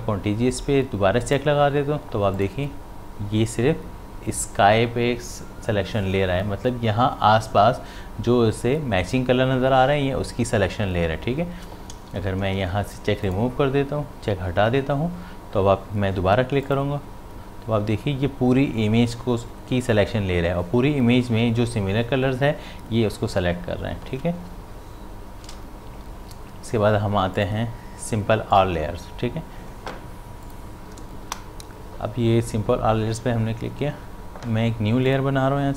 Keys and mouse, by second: 1.2 click, 11.9 click, 12.1 ctrl+d, 13.3 click, 16.6 click, 24.7 click, 25.4 ctrl+d, 27.4 click, 35.1 click.